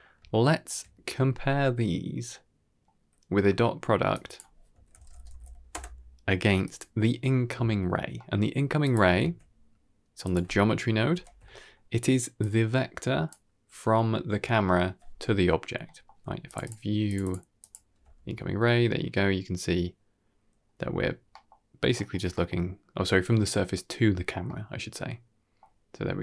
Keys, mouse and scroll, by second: 0.0 scroll down 2, 0.2-0.5 shift+middle drag, 1.9 scroll up 3, 2.2-2.8 middle drag, 4.0-6.6 drag, 8.0 middle click, 8.7 click, 9.1 shift+d, 11.0 ctrl+h, 11.3 middle click, 12.3-13.2 drag, 15.7 middle click, 16.4 ctrl+shift+click, 17.0 ctrl+shift+click, 17.1 ctrl+shift+click, 17.5 ctrl+shift+click, 18.6-20.9 middle drag, 21.2 middle click, 21.8 middle click, 22.2 middle click, 24.3-25.5 middle drag, 25.6-26.2 middle drag.